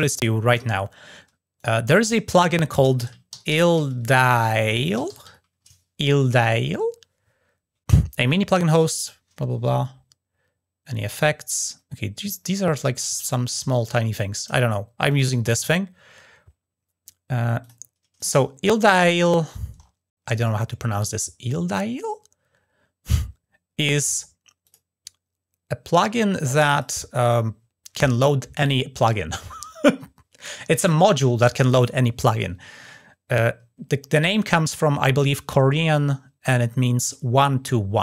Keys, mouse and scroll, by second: 1.3 right click, 14.9 click, 17.4 click, 18.0 click, 18.4-18.8 scroll up 2, 19.2 middle click, 19.4 scroll down 1, 20.0 middle click, 24.4 click, 26.5 drag.